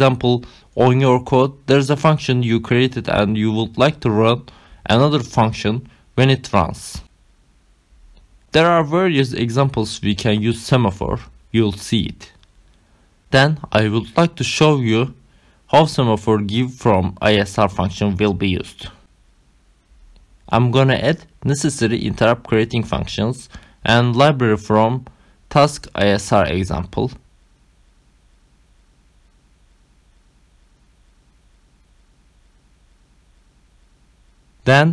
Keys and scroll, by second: 9.9 ctrl+c, 12.4 Return, 13.0 Up, 13.4 ctrl+v, 21.8 ctrl+c, 25.0 Return, 25.5 Up, 25.9 ctrl+v, 30.9 Return, 31.4 ctrl+alt+5, 31.8-34.9 typing.